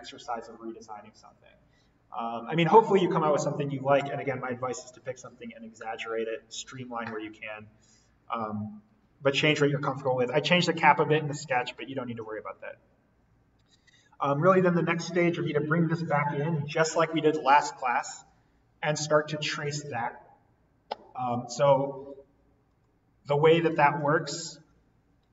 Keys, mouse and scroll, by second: 22.7 click.